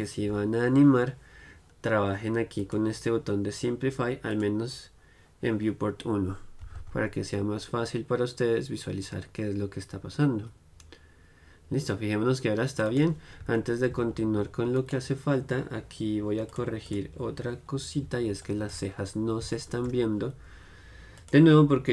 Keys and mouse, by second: 13.3 right click, 13.6 middle click, 14.2-16.6 drag, 14.2-16.6 right drag, 16.6-18.5 middle drag, 18.7 middle click, 19.0 middle click, 19.8-21.3 middle drag, 21.3-21.9 drag.